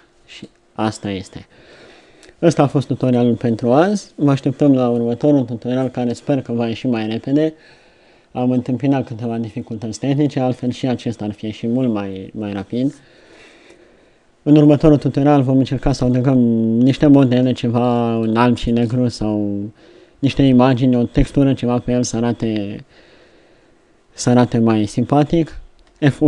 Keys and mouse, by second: 1.6-21.6 middle drag, 23.2 middle click, 23.4 middle click.